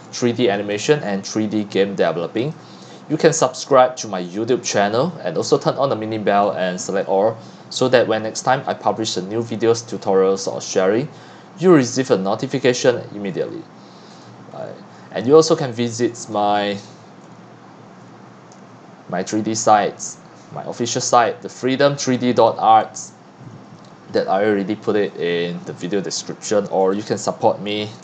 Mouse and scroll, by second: 0.3 middle click, 0.7-2.5 scroll, 2.5-8.3 drag, 8.3 middle click, 8.3 scroll down 1, 8.3-9.0 scroll, 9.0-10.6 middle drag, 9.0-10.4 scroll down 5, 10.4 scroll down 1, 10.6-11.7 scroll up 8, 11.7-12.0 scroll up 1, 12.0-12.8 scroll down 4, 12.8-13.3 scroll up 5, 13.3-14.5 scroll down 2, 14.5-15.4 scroll down 7, 15.4 scroll, 15.7 scroll down 3, 15.8-16.2 scroll, 16.3 click, 16.6-17.4 ctrl+scroll, 17.9-21.0 scroll, 21.3-28.0 drag.